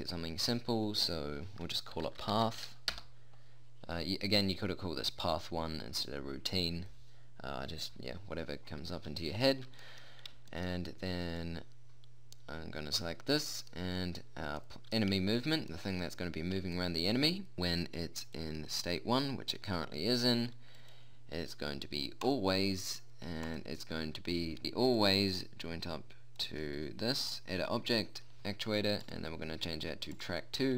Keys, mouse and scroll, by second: 10.4-13.6 middle drag, 14.4 middle click, 18.7-20.5 drag.